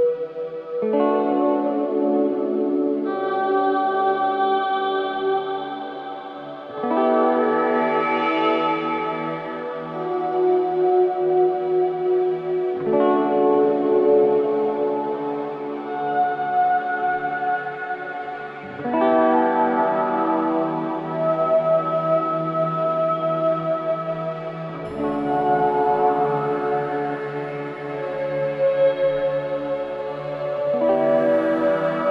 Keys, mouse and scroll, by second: 1.2-2.2 scroll down 1, 2.2 click, 4.5 alt+click, 4.9 alt+right click, 5.4 alt+click, 5.7 alt+right click, 6.2 alt+middle click, 7.1-8.3 alt+right drag, 8.9 alt+right click, 9.2 alt+middle click, 9.7 alt+right click, 10.8 alt+click, 11.0 alt+right click, 11.4 alt+click, 14.1 ctrl+z, 14.9-16.5 scroll down 1, 16.5 click, 20.0 alt+click, 20.5 alt+right click, 20.8 alt+click, 21.3-22.7 alt+right drag, 23.4 alt+click, 23.7 alt+right click, 24.6-25.4 scroll down 1, 25.4-27.1 scroll up 1, 30.9 3.